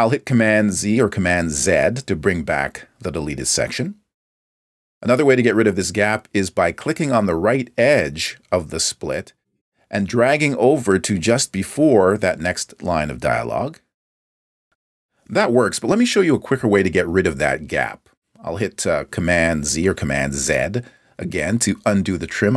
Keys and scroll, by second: 2.6 super+z, 4.3 super+z, 22.3 super+z.